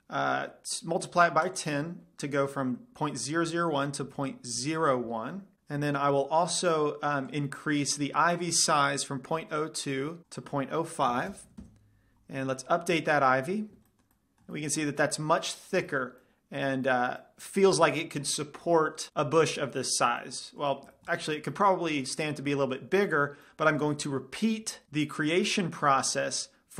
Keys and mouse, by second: 1.7-3.7 drag, 6.9-8.7 drag, 10.3-12.1 drag, 13.5 click, 15.6-19.0 middle drag, 20.1-22.1 middle drag, 25.3-26.7 middle drag.